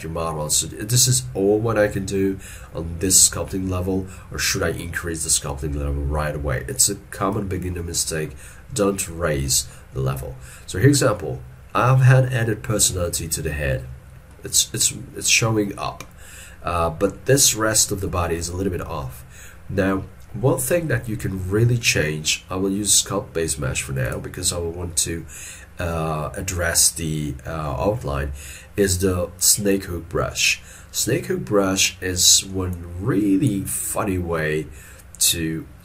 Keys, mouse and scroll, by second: 7.7 shift+middle click, 8.0 shift+middle click, 9.5 shift+middle click, 31.3 middle click.